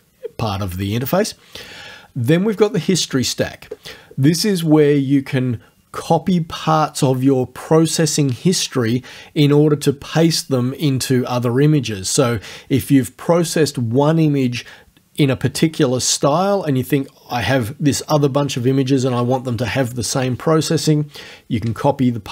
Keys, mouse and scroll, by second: 2.6 click, 4.6 click.